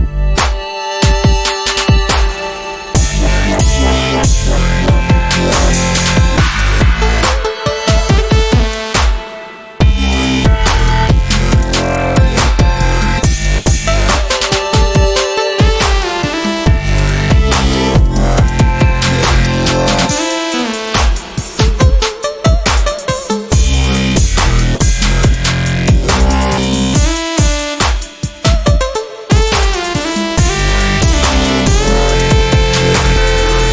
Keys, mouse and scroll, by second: 0.5 click, 4.9 v, 5.1 click, 6.8 ctrl+shift+Up, 8.3-11.5 drag, 13.5 right click, 14.6 click, 16.5-16.9 ctrl+scroll down 1, 16.9 ctrl+scroll up 1, 18.0 r, 18.4-20.4 drag, 24.4 ctrl+shift+p, 25.7 click, 27.6 shift+Up, 28.7 Down, 30.5 click, 31.6 shift+Down, 32.9 v, 33.4 click.